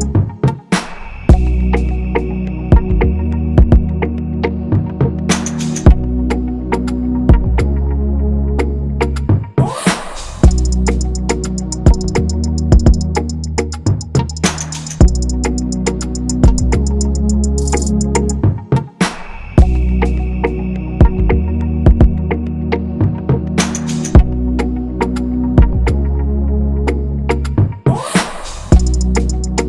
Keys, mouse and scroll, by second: 0.0 ctrl+-, 0.3 ctrl+-, 1.1-1.7 scroll, 4.3 i, 4.6-5.0 scroll down 1, 5.0-6.2 scroll, 7.0-7.3 scroll, 7.4-8.6 scroll up 1, 8.4-9.1 typing, 10.0-10.4 scroll down 1, 10.4-10.9 scroll, 10.7-13.0 typing, 11.8 scroll up 1, 14.6 scroll down 1, 14.9 BackSpace, 17.3-18.9 typing, 17.6-18.4 scroll down 1, 20.4 scroll, 20.8 typing, 21.8-22.2 scroll down 1, 22.2 scroll, 22.5 ctrl+-, 22.6 ctrl+-, 22.8-24.4 scroll down 1, 24.5 ctrl+z, 27.1 scroll, 27.6-27.9 scroll down 1, 27.9-28.3 scroll, 28.1-28.9 typing.